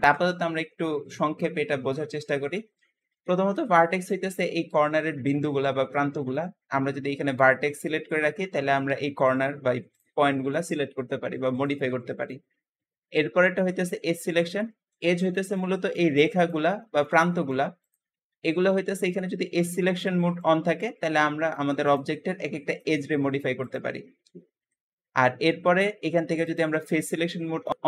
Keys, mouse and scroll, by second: 3.8 click, 4.3-8.6 middle drag, 8.6 g, 9.8 click, 10.2 middle click, 10.6 g, 11.9-13.9 shift+middle drag, 13.9 shift+click, 14.6-16.2 shift+middle drag, 16.2 shift+click, 16.7 shift+middle click, 17.6 shift+click, 20.0-21.7 shift+middle drag, 21.7 shift+click, 21.9 g, 23.0-23.5 scroll down 1, 23.5 click, 23.9 g, 26.3 click, 27.2 middle click.